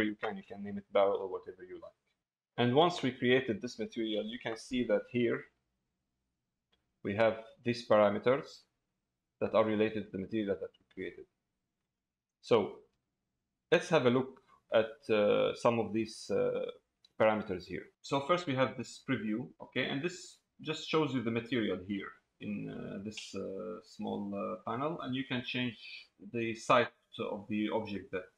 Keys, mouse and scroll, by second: 0.8 middle click, 23.6 middle click, 27.9 click.